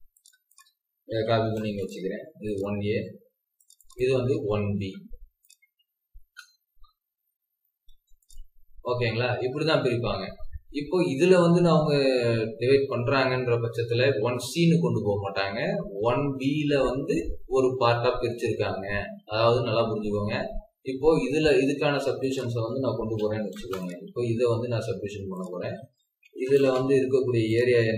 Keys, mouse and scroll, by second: 0.5 double click, 1.0-1.4 typing, 2.7 Escape, 3.7 double click, 4.7 scroll up 1, 6.1 BackSpace, 7.8 typing, 8.7 scroll down 1, 9.9 scroll up 1, 19.3-20.2 scroll down 1, 20.2-22.3 scroll up 1, 23.0-23.4 typing, 24.1 scroll down 1, 24.9-25.4 scroll up 1, 25.5 Escape, 26.0-26.9 typing.